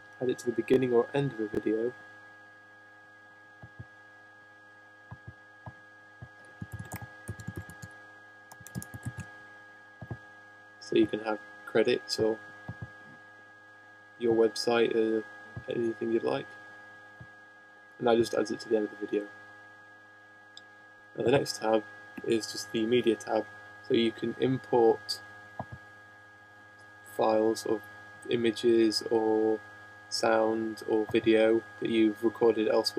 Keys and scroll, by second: 17.9 Return, 18.3 shift+?, 31.4 shift+?.